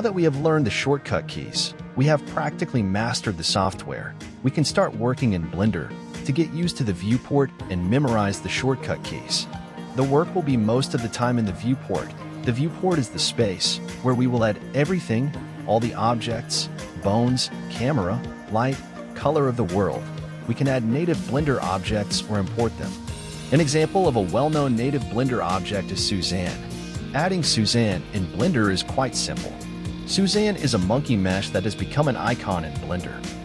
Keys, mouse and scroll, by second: 19.0 right click.